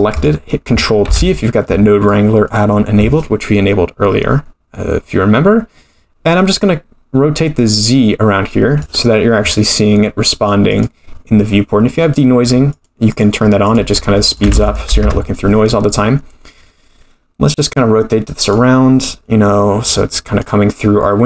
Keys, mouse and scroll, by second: 0.1 click, 1.1 ctrl+t, 1.6-2.1 scroll down 5, 2.1 middle click, 6.5-8.8 drag, 10.7 click, 11.3-12.0 scroll up 1, 12.0 click, 12.7 click, 13.1-13.8 drag, 14.3-15.4 drag, 16.5-18.5 drag, 19.9 click.